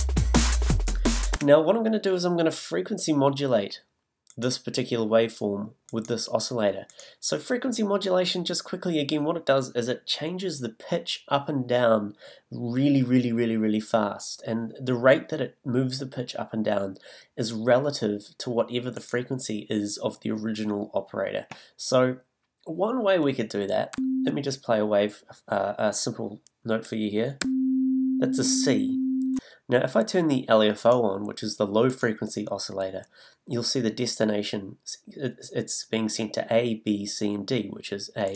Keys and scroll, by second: 1.3 space, 23.9 a, 27.4 a.